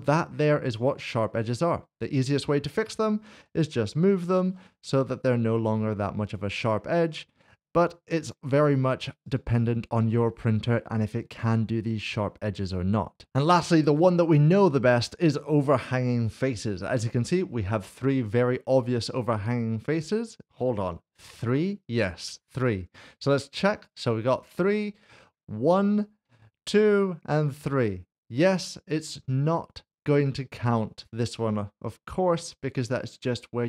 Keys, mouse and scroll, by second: 0.8 middle click, 0.9 click, 3.4 g, 4.3 y, 6.3 click, 7.0 Tab, 9.3 click, 13.3 click, 15.0 click, 16.8 middle click, 21.3 Tab, 23.9 click, 24.8 middle click, 32.5 middle click.